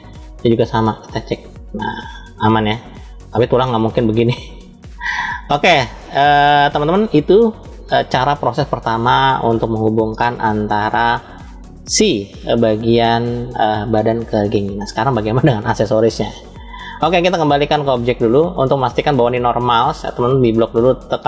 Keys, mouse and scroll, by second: 0.9 click, 4.4 ctrl+z, 5.2 scroll down 2, 5.9-6.6 middle drag, 7.0-7.7 shift+middle drag, 8.3-8.9 scroll down 2, 16.4-18.5 drag, 18.6 click.